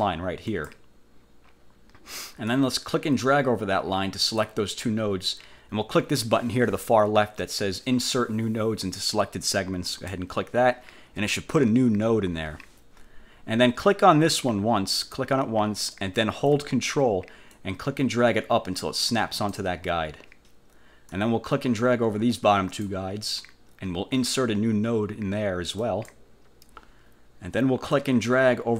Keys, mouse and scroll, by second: 0.6 click, 2.6-4.7 drag, 10.1 click, 15.1 click, 17.6-19.8 ctrl+drag, 21.2-23.2 drag, 25.9 click, 28.1-28.7 drag.